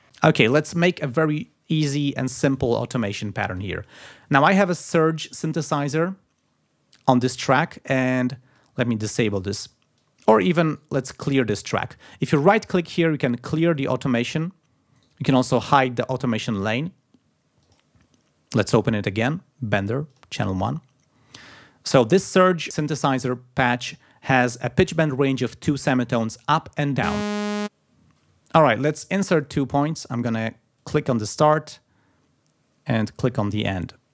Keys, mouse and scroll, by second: 4.4 click, 5.3 scroll up 2, 7.5 click, 7.9 scroll down 2, 8.5-9.5 drag, 10.0 click, 10.7 right click, 11.5 click, 12.3 right click, 14.0 click, 14.9 right click, 16.6 click, 17.7 click, 20.1 click, 27.1 space, 28.0 shift+right click, 30.7 click, 33.6 click.